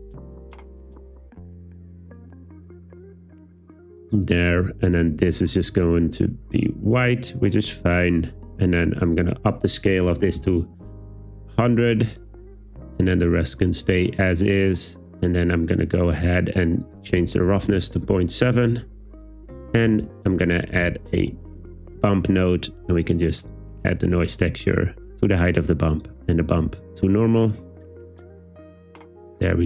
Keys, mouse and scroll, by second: 5.3 click, 8.1 click, 9.1-10.8 drag, 10.4 typing, 16.8-18.5 drag, 19.9 shift+a, 23.5 click, 24.7 click, 26.8 click.